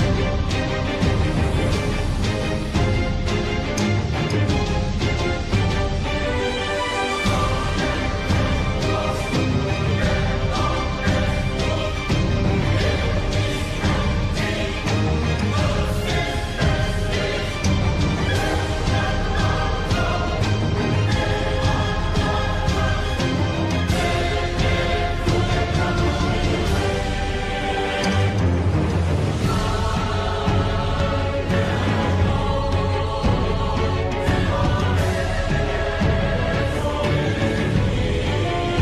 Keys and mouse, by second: 2.2 shift+middle click, 2.7 middle click, 4.5 click, 5.4 KP_3, 6.0 g, 11.7 shift+middle click, 12.2 middle click, 15.2 shift+click, 16.4 KP_3, 17.9 g, 20.4 middle click, 22.3 ctrl+r, 25.6 KP_7, 26.7 middle click, 28.2 click, 30.2 ctrl+click, 31.6 KP_7, 33.6 g.